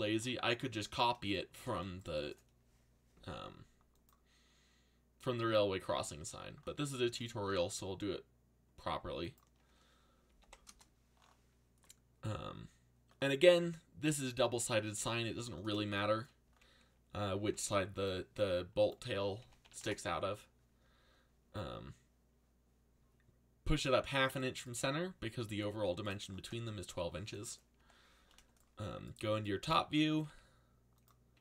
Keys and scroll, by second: 10.0-10.9 typing, 17.1-18.0 typing, 19.1-20.1 typing, 29.8-31.4 typing.